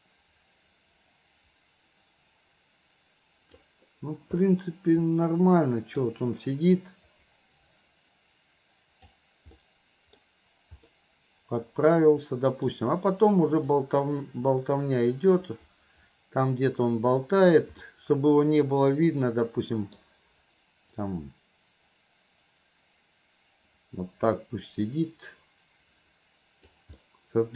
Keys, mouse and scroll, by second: 4.5-6.0 middle drag, 6.9-9.2 drag, 9.6-10.2 middle drag, 11.0-12.7 middle drag, 13.8-17.7 drag, 17.8-20.0 middle drag, 21.1-26.9 drag, 27.0-27.5 middle drag.